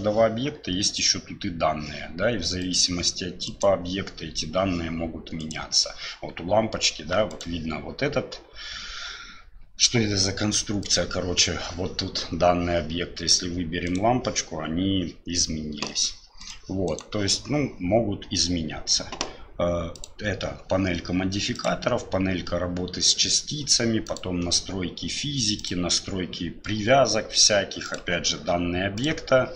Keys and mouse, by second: 2.6 right click, 3.4 right click, 5.4 right click, 7.3 right click, 10.9 click, 13.9 right click, 16.4 right click, 16.9 right click, 19.9 click, 21.5 click, 24.1 click, 25.6 click.